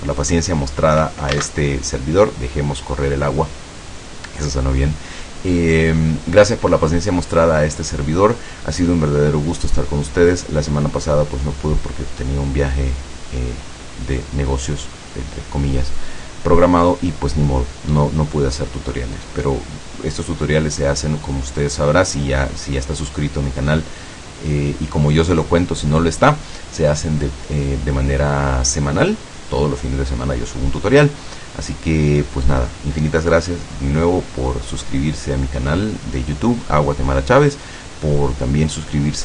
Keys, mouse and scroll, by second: 1.5 alt+a.